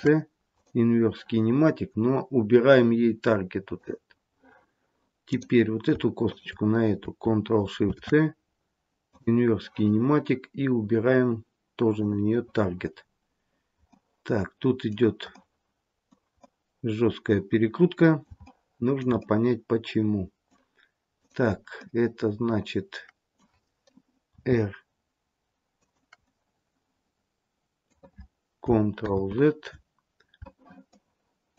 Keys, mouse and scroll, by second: 3.6 click, 5.2 click, 6.1 shift+click, 7.7 ctrl+shift+c, 11.8 click, 12.9-13.8 scroll down 2, 13.8 middle click, 16.4 middle click, 18.4 shift+middle click, 19.2 middle click, 21.1 click, 21.7 middle click, 24.3 r, 26.2 middle click, 29.1 ctrl+z, 30.8 shift+middle click.